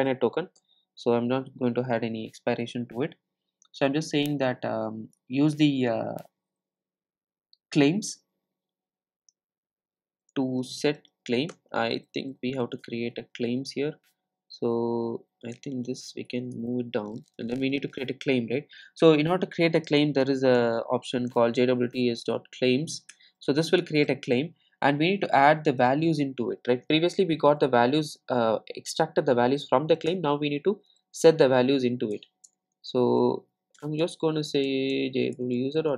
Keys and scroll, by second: 11.5 Return, 23.1 Return, 30.1 Return, 35.4 Return.